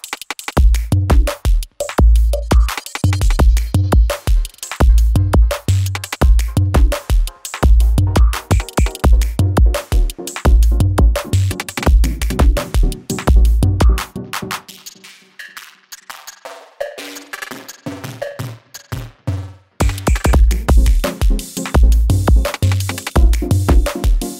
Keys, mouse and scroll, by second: 0.1 click, 0.5 [, 1.0 Page_Down, 1.6 click, 2.1 [, 2.5 Page_Down, 3.1 click, 3.5 [, 3.9 space, 7.1 space, 7.7 click, 8.1 space, 11.1 space, 11.8 =, 12.5-13.4 click, 13.4 space, 16.1 space, 16.7 -, 17.5-18.2 click, 18.0 space, 20.8 space, 21.4 click, 24.1 ctrl+n, 24.1-24.3 typing.